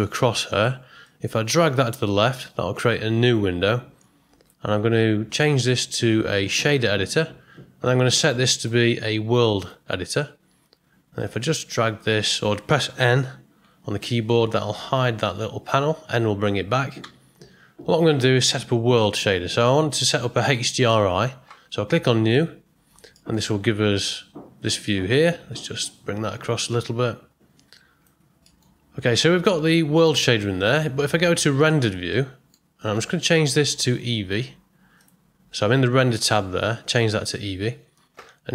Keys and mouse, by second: 1.0-4.5 drag, 5.6-7.1 drag, 8.6-9.6 drag, 13.6 n, 15.7 n, 17.0 n, 22.4 click, 23.2 middle click, 26.3-28.0 drag, 28.5 middle click, 29.7 click, 30.6 click, 32.1 middle click, 33.6-35.1 drag.